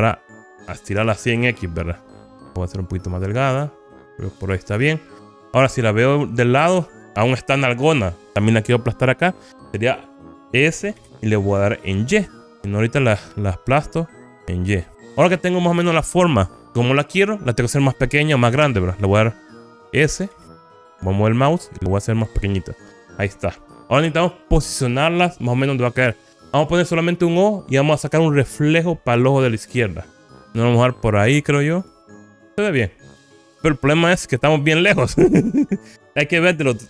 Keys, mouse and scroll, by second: 4.6 click, 6.2 KP_3, 11.1 s, 12.5 y, 14.9 click, 16.6 KP_1, 20.3 s, 22.8 click, 32.0 click, 34.4 KP_3.